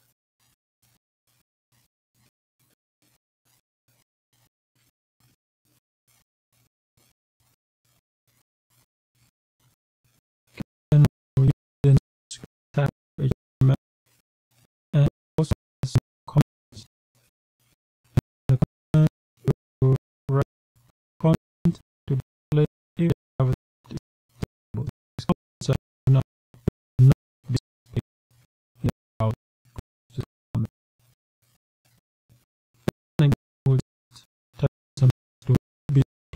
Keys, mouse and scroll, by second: 0.0-1.6 typing, 2.9 shift+1, 3.9 Right, 5.6 ;, 6.4 Down, 7.4 Return, 9.2 shift+,, 10.7-13.6 typing, 13.9 Return, 14.9 Up, 17.7-32.6 typing, 34.2 Return, 35.7-36.3 typing.